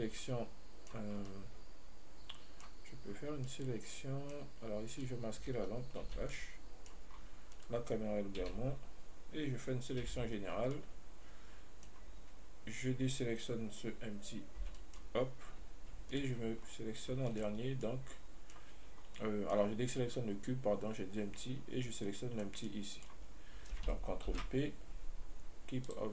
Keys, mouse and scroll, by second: 0.1-1.4 middle drag, 1.4 scroll down 1, 1.5-3.1 middle drag, 3.1-3.7 scroll up 1, 3.7-5.2 middle drag, 5.2 right click, 6.3 h, 6.6-7.4 middle drag, 7.4-7.8 scroll down 1, 7.8-8.7 right drag, 8.7 h, 9.0-10.3 scroll up 1, 10.3 a, 11.0-14.9 middle drag, 14.9 b, 16.4 shift+right click, 16.9 scroll up 1, 17.6-19.3 shift+middle drag, 19.3 scroll down 1, 19.4-24.6 middle drag, 24.6 ctrl+p.